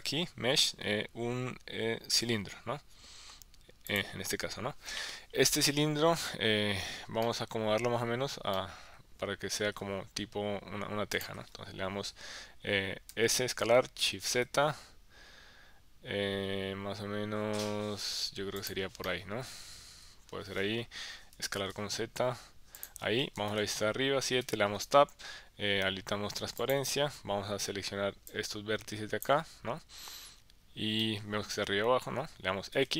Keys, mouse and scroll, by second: 7.2 middle click, 8.5 middle click, 11.2 click, 13.1 s, 14.3 shift+z, 18.6 click, 19.0-20.6 middle drag, 21.3 s, 21.6 z, 22.7 click, 23.4 KP_7, 24.4 Tab, 26.6 click, 28.3-29.4 drag, 31.0-32.2 middle drag, 32.7 x.